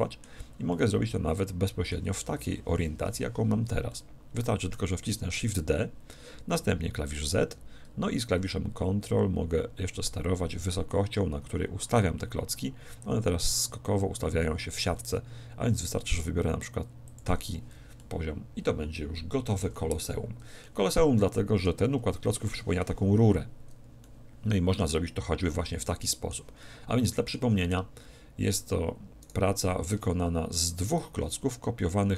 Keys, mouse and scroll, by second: 3.9-5.8 middle drag, 5.4 shift+d, 17.2-18.9 drag, 18.0-19.6 middle drag, 19.6 a, 20.2-22.6 middle drag, 24.0-28.6 middle drag, 29.2-32.1 right drag.